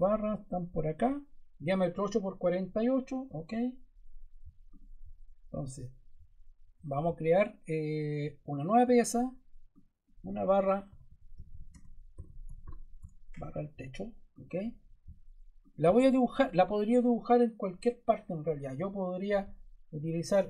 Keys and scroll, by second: 10.6-13.4 typing.